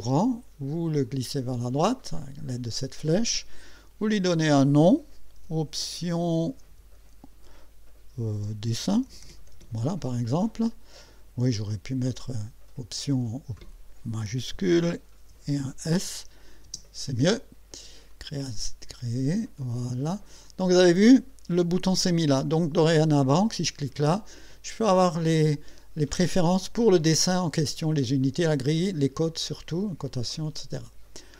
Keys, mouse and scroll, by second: 1.0 click, 4.1 click, 5.1-10.0 typing, 12.0-13.6 drag, 14.2-16.7 typing, 18.1 click, 20.5 click, 22.9 click, 27.2 click, 28.2 click, 28.8 click.